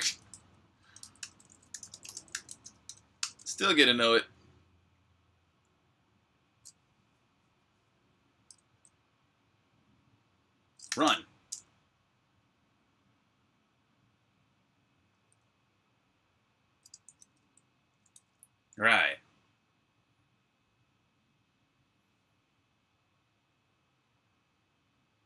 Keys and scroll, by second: 0.0-2.9 typing, 1.1 Return, 5.1 typing, 10.8 r, 10.9 Return, 14.8-15.5 typing, 17.2 super+Tab.